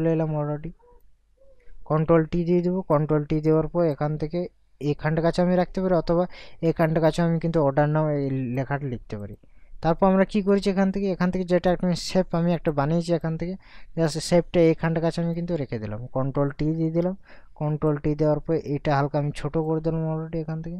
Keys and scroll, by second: 2.3 ctrl+t, 16.8 ctrl+t.